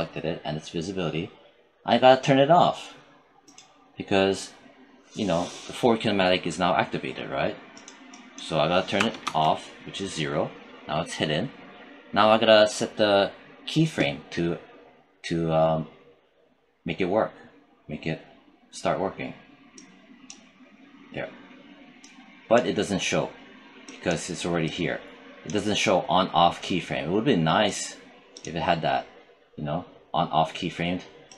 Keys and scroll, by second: 8.8 0, 9.1 Return.